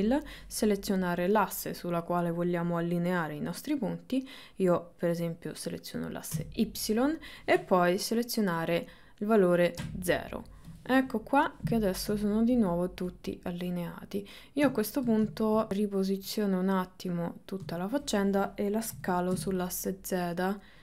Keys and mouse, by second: 12.3 shift+middle click, 13.2-14.7 drag, 15.0 shift+middle click, 15.4 ctrl+middle click, 15.7-17.6 drag, 17.8 shift+middle click, 19.0 s.